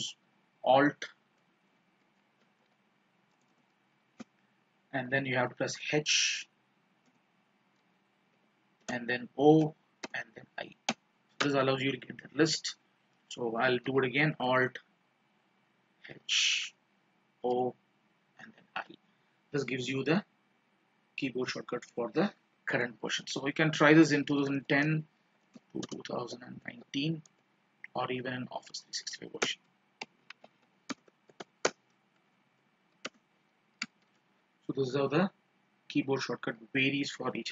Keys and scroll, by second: 32.7 ctrl+space, 34.0 alt+o, 34.2 alt+a.